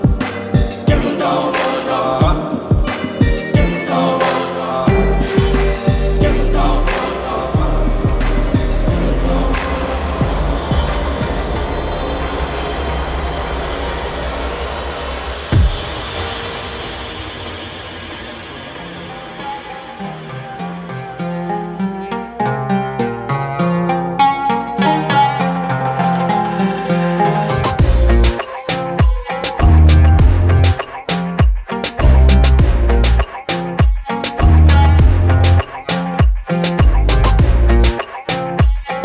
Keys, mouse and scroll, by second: 1.1 click, 1.9 click, 5.3 click, 6.3 scroll down 2, 6.9 click, 7.4 click, 9.0 click, 10.5-11.1 drag, 11.5 click, 13.6 alt+click, 14.2 scroll down 2, 14.5 scroll up 2, 14.8 alt+middle click, 15.9 scroll up 2, 16.8 click, 19.4-19.8 scroll down 2, 20.6 click, 23.7 alt+click, 25.2 alt+click, 32.1 alt+click, 36.2 alt+click, 36.9 typing, 37.2 Return, 38.2 alt+click, 38.6 scroll up 1.